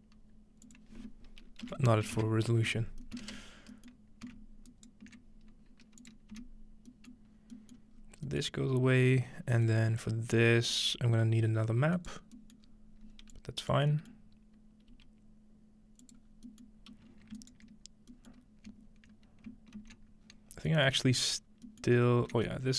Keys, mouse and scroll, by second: 0.7-2.1 drag, 3.0 ctrl+middle click, 3.6-5.2 scroll up 1, 4.7 right click, 6.0 click, 6.3 click, 6.5-8.7 scroll down 2, 6.5 x, 6.9 middle click, 8.7 scroll up 2, 9.8-10.7 scroll up 1, 10.7-12.8 drag, 12.0 right click, 12.2-12.6 scroll down 1, 12.6-13.1 scroll up 3, 13.3-14.0 drag, 14.0-14.9 scroll up 1, 14.9 g, 15.1 middle click, 16.0-17.4 drag, 16.2-16.8 scroll down 1, 16.7-17.4 middle drag, 16.8-17.4 scroll up 1, 18.3-18.7 scroll up 1, 19.8 ctrl+x, 20.2-21.9 scroll down 1, 20.3 typing, 20.7-22.3 ctrl+middle drag, 21.9 scroll up 2, 22.5-22.7 middle drag, 22.6-22.7 scroll up 1.